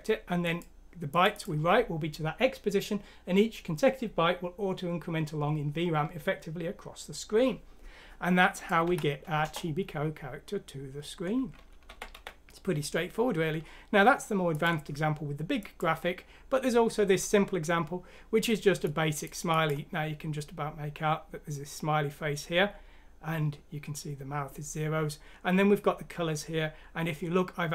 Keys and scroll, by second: 8.8 F6, 9.4 Return, 11.8 typing.